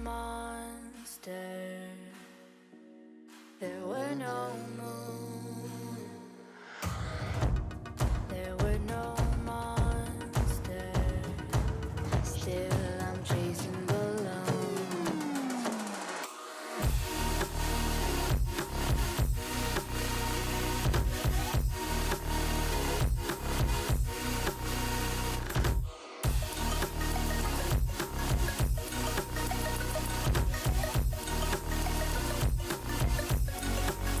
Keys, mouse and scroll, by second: 0.0 g, 1.6-1.9 middle drag, 1.9 scroll up 1, 2.0-2.3 scroll down 5, 2.3-3.4 middle drag, 3.4 click, 3.6-4.8 middle drag, 4.8 KP_3, 6.2 shift+d, 8.3 alt+z, 8.5-9.6 middle drag, 9.6 alt+z, 10.2 ctrl+KP_1, 10.4-10.9 scroll up 3, 10.9 shift+middle click, 11.5 click, 11.9 click, 13.1 click, 13.5 shift+d, 17.8 scroll up 3, 18.0 alt+z, 18.3 click, 18.8 x, 19.4 scroll down 4, 19.6-20.0 middle drag, 20.0 click, 20.1 alt+z, 20.2 click, 20.4 scroll down 2, 20.5-21.6 middle drag, 21.6 click, 21.8 Tab, 22.0 click, 22.4-23.5 middle drag, 23.5-24.5 drag, 24.5 g, 25.6-27.0 drag, 27.3 click, 27.4 click, 28.3 middle click, 29.2 Tab, 30.2 KP_3, 30.4 shift+middle click, 30.6-31.0 scroll up 4, 31.0 alt+z, 31.5-32.8 drag, 32.8 x, 33.5 middle click.